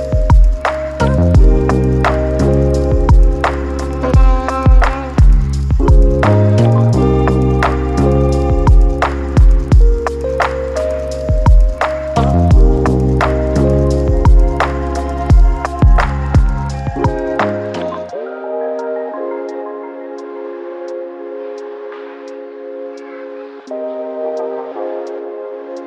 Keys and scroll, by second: 5.0 ctrl+d, 9.0 ctrl+d, 12.7 ctrl+z, 24.0 v, 24.2 v, 25.4 ctrl+1.